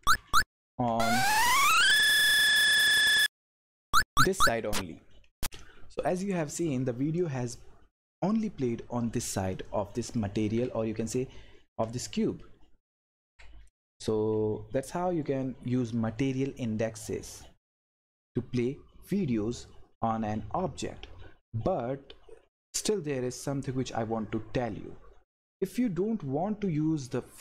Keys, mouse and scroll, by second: 0.0 Right, 2.0 Up, 2.6 Down, 2.7 Left, 3.5 Up, 4.0 Down, 9.5 click, 10.3 Left, 13.7 Down, 14.3 Left, 15.6 Up, 16.5 Left.